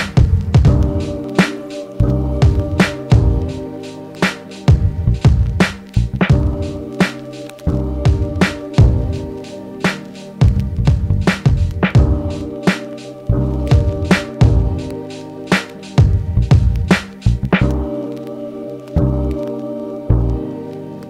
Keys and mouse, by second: 1.1 r, 5.9-6.3 middle drag, 6.3-17.3 drag, 18.1 ctrl+j, 19.8 ctrl+Tab, 20.7 ctrl+Tab.